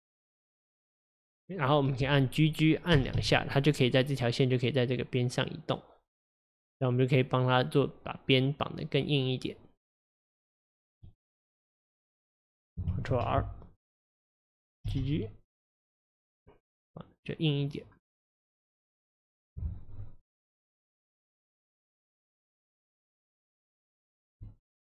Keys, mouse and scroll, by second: 3.0 g, 10.0 click, 13.1 ctrl+r, 18.9 click, 22.0-23.7 middle drag, 23.7 click, 23.9 click, 24.5 alt+click, 24.6 alt+click.